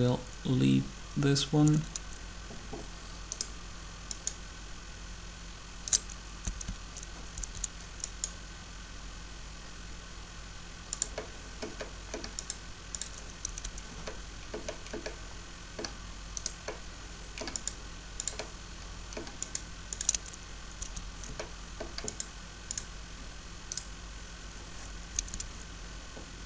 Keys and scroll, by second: 1.7 Up, 6.3 Down, 7.2 Up, 13.4 Up, 20.6 Up, 25.1 Up.